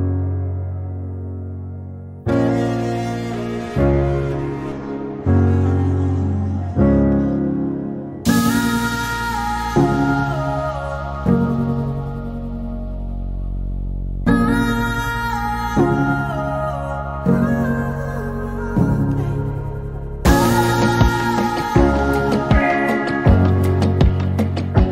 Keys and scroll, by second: 8.8-13.6 typing.